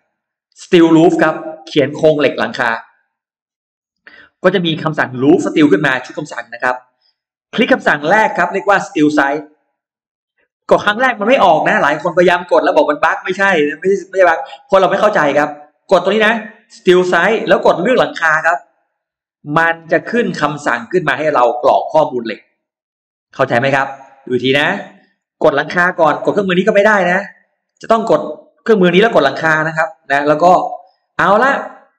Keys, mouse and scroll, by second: 2.7 click, 4.0-5.1 drag, 6.3 click, 9.3 click, 10.2 click, 10.5 click, 10.7 click, 11.0 click, 11.7 click, 11.9 click, 12.1 click, 12.4 click, 12.6 click, 12.8 click, 13.0 click, 13.2 click, 13.4 click, 13.7 click, 13.9 click, 14.1 click, 14.8 click, 16.6 click, 18.6 click, 20.2-21.2 drag, 21.4 scroll down 1, 22.0 scroll up 1, 23.1 click, 24.4 click, 24.8 click, 25.4 click, 26.4 click, 27.1 click, 28.1 click, 29.2 click, 30.4-31.9 drag.